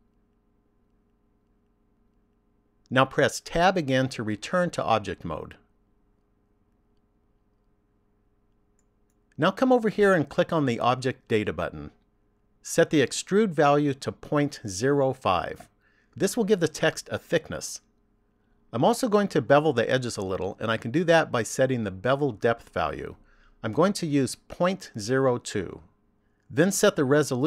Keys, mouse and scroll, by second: 0.0-2.4 typing, 4.9 Tab, 7.7 middle click, 12.1 click, 14.7 click, 23.5 click.